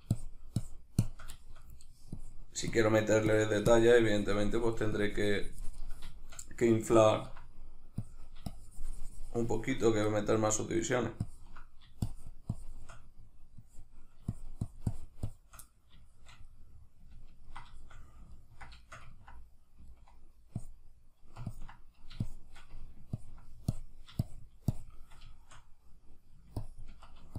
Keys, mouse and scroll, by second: 1.4 shift+middle click, 2.2-6.2 drag, 6.2 shift+middle click, 7.0-9.8 ctrl+drag, 9.8-11.2 middle drag, 11.2-15.6 ctrl+drag, 15.6-20.6 middle drag, 20.6-25.3 drag, 25.3-26.7 shift+middle drag, 26.7-27.3 ctrl+drag.